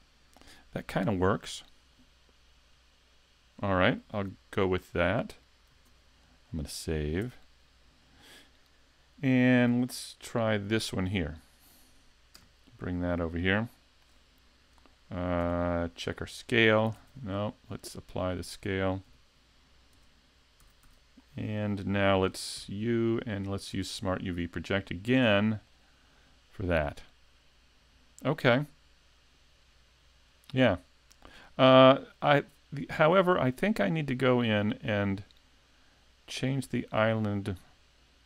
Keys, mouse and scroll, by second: 5.7 s, 7.2 Tab, 10.0 click, 11.4 right click, 12.9 middle click, 15.4 n, 19.1 ctrl+n, 20.0 Tab, 20.6 a, 20.8 a, 21.2 middle click, 22.7 u, 34.6 click.